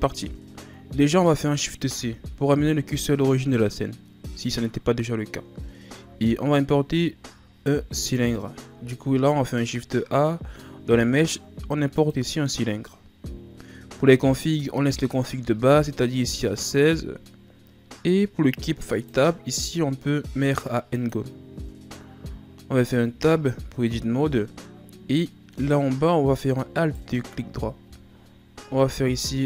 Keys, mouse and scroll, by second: 8.1 click, 9.0 shift+a, 18.9-21.9 drag, 22.5-23.1 scroll up 1, 23.1 Tab, 23.9 ctrl+scroll up 1, 24.5-26.0 middle drag, 26.0-26.7 scroll up 1, 26.7 alt+right click, 28.6 i.